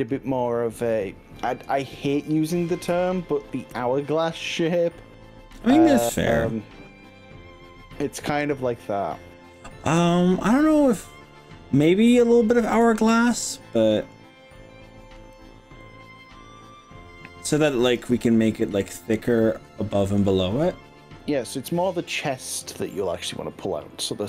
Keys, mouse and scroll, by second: 1.8 click, 2.9 ctrl+z, 4.2-6.1 middle drag, 10.8-11.6 scroll up 3, 12.2 click, 13.1-14.1 middle drag, 14.6 middle click, 15.4 click, 15.8-17.5 middle drag, 18.0 click, 23.0-24.0 middle drag.